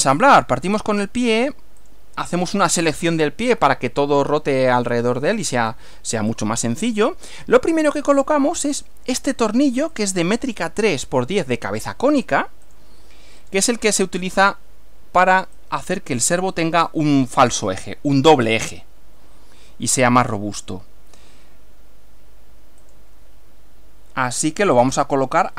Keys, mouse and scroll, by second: 0.1 right click, 2.0 click, 3.2-3.9 scroll down 2, 3.9-5.6 middle drag, 5.8 scroll down 1, 6.4 click, 10.0 click, 12.7 click, 13.4 click, 15.6-17.0 drag, 22.9 click, 24.8 click.